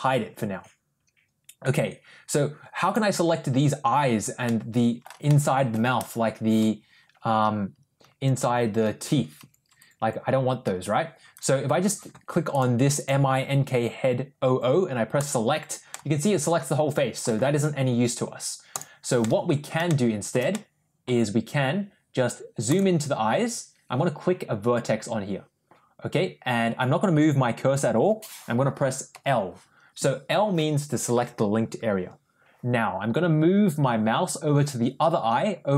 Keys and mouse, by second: 2.7 click, 4.3 middle click, 5.1 shift+middle click, 12.4 click, 12.8 click, 15.8-17.1 middle drag, 18.6 click, 19.1 middle click, 19.7 shift+middle click, 20.4 middle click, 22.5 click, 29.0 l.